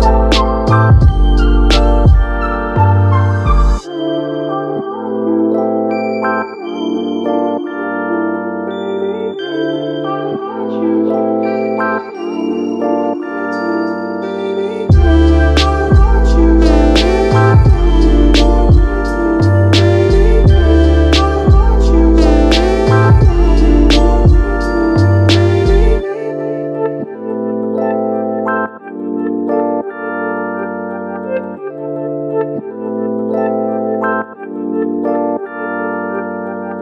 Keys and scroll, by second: 6.1 super+z, 6.6 super+z, 9.4 space, 11.5 super+z, 25.4 super+z.